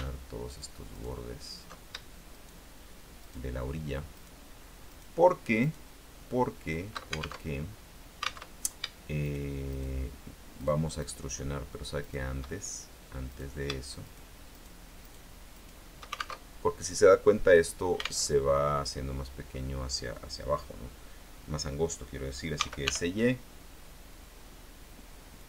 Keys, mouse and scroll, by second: 0.6 alt+shift+right click, 1.1 alt+shift+right click, 2.5 shift+right click, 3.4 shift+right click, 4.3 shift+right click, 5.0 shift+right click, 5.8 shift+right click, 7.5 alt+shift+Tab, 8.6 alt+Tab, 9.4 shift+right click, 9.8 shift+right click, 10.7 shift+right click, 11.1 shift+right click, 12.2 shift+right click, 13.4 right click, 14.2 shift+right click, 14.6 shift+right click, 15.2 shift+right click, 15.7 shift+right click, 16.5 alt+shift+Tab, 18.4 alt+Tab, 22.7 s, 23.0 y.